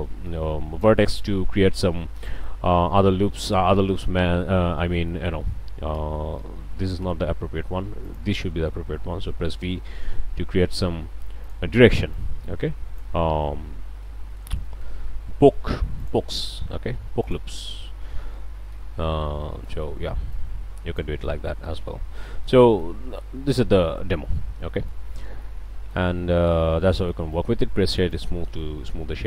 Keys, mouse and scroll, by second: 1.2 click, 1.3 middle click, 2.0-2.6 middle drag, 3.0 middle click, 4.6 scroll up 1, 5.1-5.4 shift+middle drag, 5.9 ctrl+z, 8.1 drag, 10.1 v, 11.4 click, 12.1-13.2 drag, 14.0-14.6 drag, 14.6-15.0 shift+drag, 15.0 shift+scroll up 1, 16.0 drag, 17.2 shift+click, 18.7 f, 19.3-19.9 drag, 20.3 click, 21.1 ctrl+z, 21.5 ctrl+click, 21.7 ctrl+click, 22.9-23.5 ctrl+shift+scroll down 4, 23.5 Tab, 23.8 middle click, 24.4 scroll up 1, 24.7 middle click, 25.1 scroll up 1, 25.4 middle click, 26.0 click, 26.9-27.3 drag, 28.5-28.8 drag, 29.1 Tab.